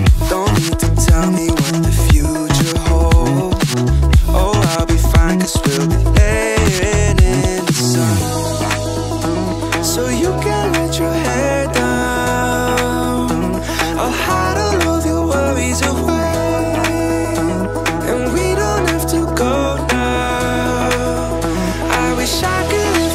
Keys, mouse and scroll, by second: 0.6 scroll up 1, 1.6-3.0 drag, 3.8-4.3 scroll up 2, 5.0 shift+middle click, 6.2 click, 7.1 click, 8.3-9.7 drag, 11.8 click, 12.6-13.8 drag, 14.5-15.4 scroll down 4, 15.9 scroll up 1, 16.7 shift+middle click, 17.4 click, 17.8 shift+a, 20.7 click, 22.5-23.1 drag.